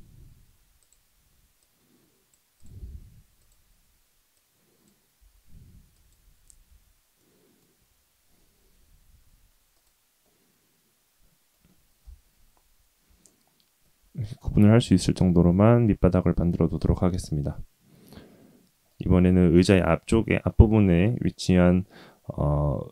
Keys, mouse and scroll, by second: 1.6 click, 2.5 click, 3.4 click, 4.3 click, 5.1 s, 6.6 Tab, 7.1 middle click, 9.7 click, 10.2-11.5 middle drag, 12.0 KP_3, 12.4-12.9 scroll down 4, 13.2-13.8 shift+middle drag, 14.9-15.3 scroll up 2, 15.3-17.7 scroll down 1, 18.8 shift+middle click.